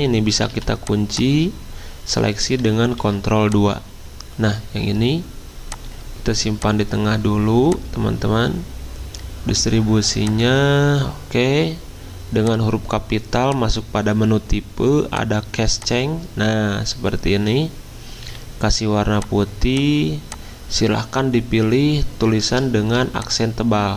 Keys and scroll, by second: 0.5 v, 2.9 ctrl+2, 18.2 d.